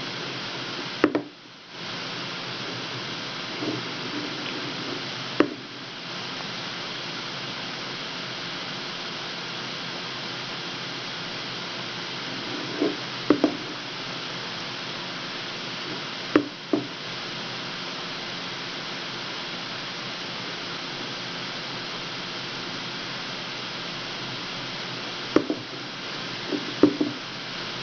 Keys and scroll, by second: 5.7 w, 13.5 w, 21.0 w, 22.8 w, 25.7 w.